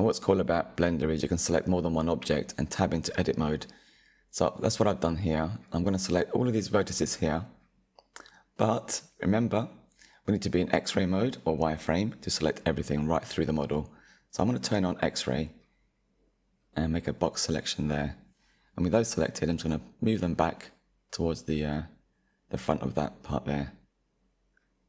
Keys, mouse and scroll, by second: 0.6 Tab, 2.2-3.1 drag, 3.8 scroll down 2, 5.2 click, 7.0-8.2 middle drag, 8.2-8.5 scroll down 3, 8.5-11.3 middle drag, 11.3 KP_1, 12.1 click, 13.3-14.7 drag, 16.6 scroll up 3, 17.7 click, 22.3 Tab, 22.7-23.4 scroll down 5, 23.4-23.8 drag, 23.8-24.8 scroll down 2.